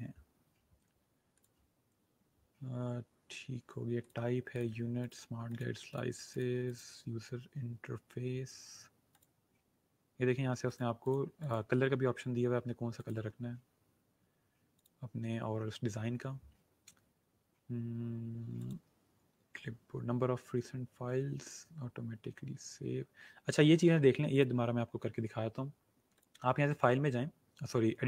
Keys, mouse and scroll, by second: 1.3 click, 4.0 click, 9.0 click, 18.5 click, 26.2 click.